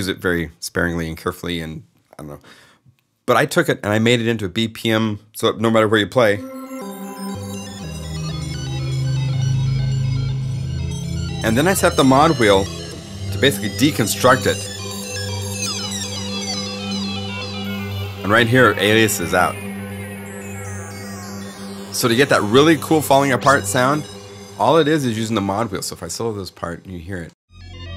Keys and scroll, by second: 25.1 alt+s.